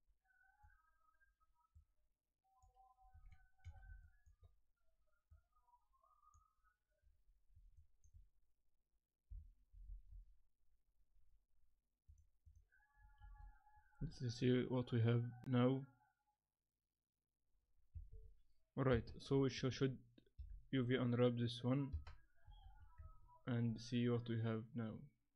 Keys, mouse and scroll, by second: 1.7 click, 3.3 middle click, 4.0 shift+middle click, 5.3 click, 7.8 shift+click, 12.5 click, 13.2 shift+z, 18.2 z, 18.9 KP_0, 19.2-19.9 scroll down 5, 19.7 Tab, 20.3 u, 21.9 KP_0, 22.6 shift+z, 23.0 Tab.